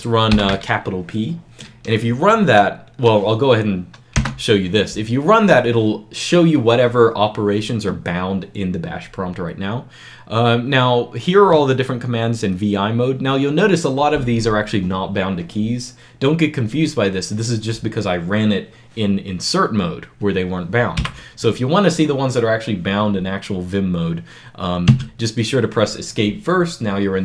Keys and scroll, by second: 0.0-0.2 typing, 4.0 Return, 20.9 Up, 24.8 Escape.